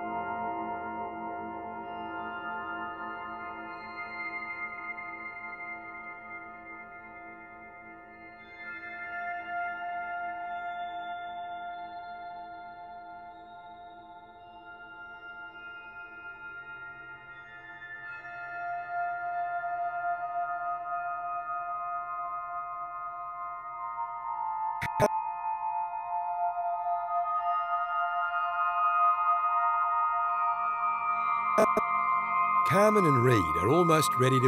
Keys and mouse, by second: 1.0 Right, 1.2 Right, 1.5 Right, 2.7 click, 3.5 click, 3.9 Right, 5.1 Right, 5.2 Right, 5.4 Right, 7.9 Right, 9.1 Left, 9.4 Left, 9.4 Left, 9.6 Left, 9.9 Left, 10.0 Left, 10.2 Left, 10.4 Left, 10.9 Left, 13.0 Right, 13.4 Right, 14.6 click, 15.4 1, 15.8 Return, 16.3 i, 18.1 Right, 19.3 click, 20.2 0, 20.5 Return, 21.9 i, 23.2-26.5 drag, 26.3 shift+d, 27.0 click, 27.6 shift+d, 28.3 shift+click, 28.5 shift+d, 29.5 shift+click, 29.8 typing, 30.9 click, 31.9 typing, 31.9 click.